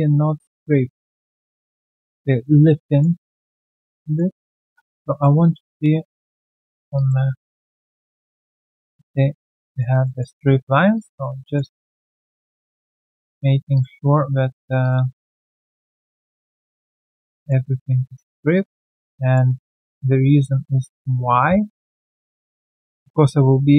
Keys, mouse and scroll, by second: 3.0-3.3 alt+scroll down 1, 3.3 alt+click, 4.6 w, 5.4 alt+click, 6.9 alt+click, 7.3-8.5 typing, 7.8 middle click, 8.6 alt+middle click, 9.7 double click, 10.0 alt+middle click, 10.2 w, 11.3 r, 11.4 alt+click, 11.7 alt+middle click, 12.5 double click, 12.8 alt+click, 13.4 alt+click, 14.5 q, 15.2 shift+click, 15.7 alt+middle click, 17.6 r, 19.1 alt+middle click, 19.5 alt+right click, 19.7 alt+click, 20.7 w, 22.0 middle click, 22.0-22.5 typing, 22.7 alt+middle click, 23.6 scroll down 1.